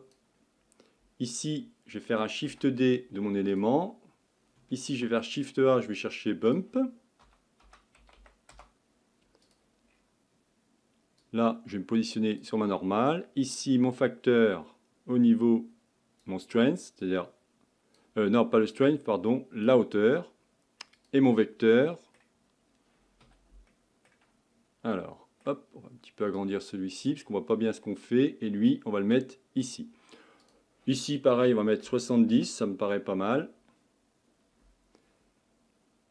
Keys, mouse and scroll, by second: 2.5 shift+d, 12.4 click, 14.0-18.1 drag, 18.9-23.5 drag, 24.1-26.5 middle drag, 26.5-36.1 drag.